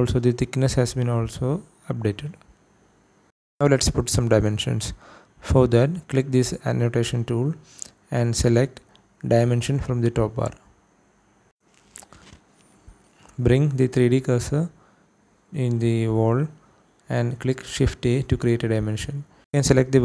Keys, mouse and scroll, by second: 3.7 scroll down 1, 4.1 shift+middle click, 4.5 scroll up 1, 5.1 shift+middle click, 6.9 click, 9.4-11.4 drag, 14.6 shift+right click, 17.1 shift+a, 17.9 click, 19.1 click.